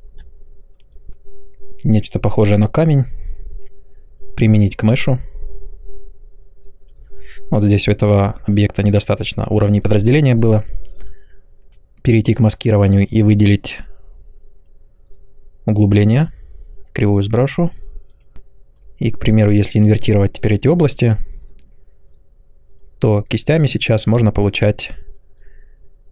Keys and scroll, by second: 24.1 space.